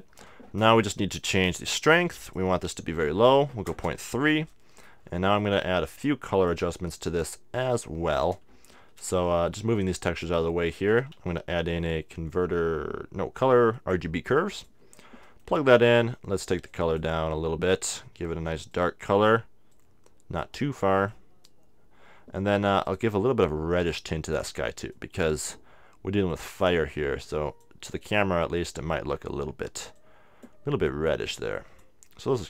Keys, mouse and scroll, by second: 0.7-2.2 middle drag, 2.2-4.4 drag, 2.2 right click, 4.8-6.3 middle drag, 6.3-9.5 drag, 9.5 middle click, 10.0-11.7 drag, 11.2 shift+a, 14.7-16.4 drag, 14.9-21.5 middle drag, 16.7-32.4 drag.